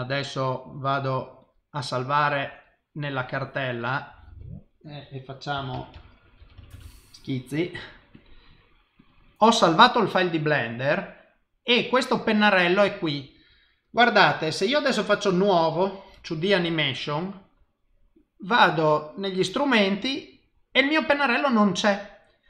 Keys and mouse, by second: 13.8 click.